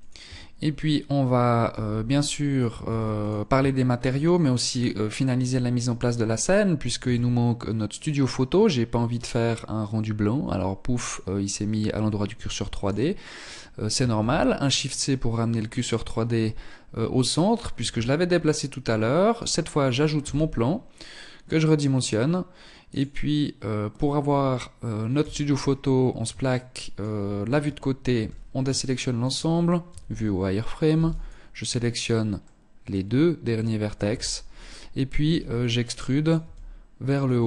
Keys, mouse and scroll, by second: 0.8 z, 1.3 middle click, 2.4 ctrl+s, 2.8 shift+middle click, 3.5-4.3 scroll down 6, 4.3 scroll up 3, 5.1-5.6 scroll up 2, 6.1 shift+a, 11.5 x, 13.2 shift+c, 13.9 scroll up 3, 14.7-15.3 scroll up 2, 17.0 shift+a, 19.3 s, 24.2 KP_3, 24.9-25.2 scroll down 3, 25.6 shift+middle click, 26.4-26.8 scroll down 2, 26.7 Tab, 27.2 a, 27.9 shift+middle click, 29.0 z, 30.0 b, 31.5 middle click, 33.1 KP_3, 34.3 e, 35.4 click, 35.5 e, 36.2 click, 36.6 e.